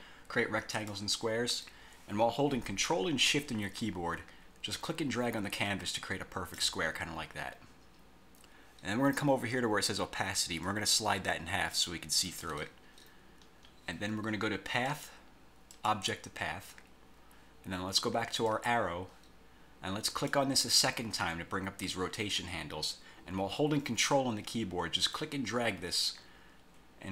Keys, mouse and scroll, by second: 0.8 click, 5.0-6.9 ctrl+shift+drag, 10.8-12.6 drag, 13.4-13.7 scroll up 2, 15.0 click, 15.9 click, 18.6 click, 20.3 click, 25.3-27.1 ctrl+drag.